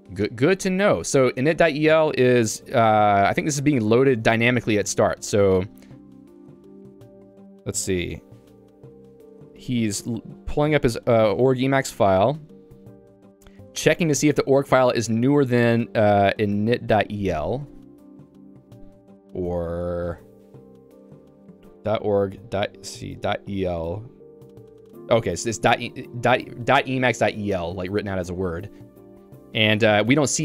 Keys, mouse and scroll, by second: 0.5 ctrl+u, 2.1 j, 4.6 k, 7.1-8.2 l, 8.3 j, 9.4 k, 10.2 j, 11.4-15.2 typing, 20.9-23.1 typing, 24.2 l, 24.9 l, 25.7 h, 28.9 j.